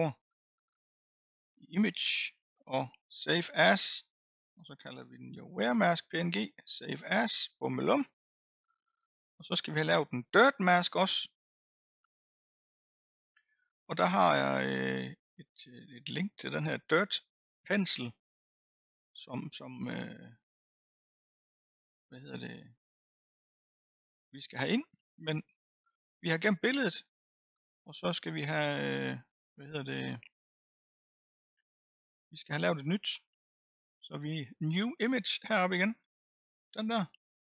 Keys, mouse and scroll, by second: 1.9-4.9 drag, 20.2-26.0 drag, 36.7-37.4 drag.